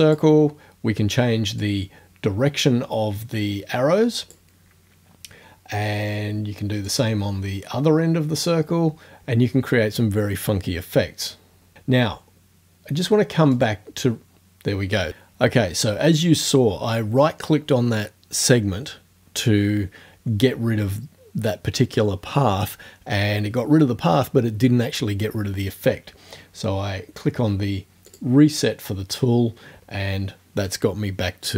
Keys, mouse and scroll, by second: 1.6-4.5 drag, 6.9-8.6 drag, 13.6 right click, 28.1 click.